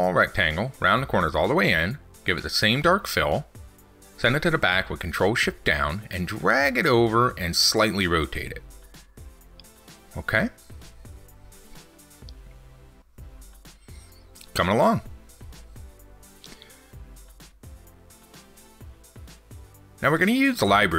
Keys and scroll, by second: 4.5 ctrl+shift+Down, 13.6 ctrl+s.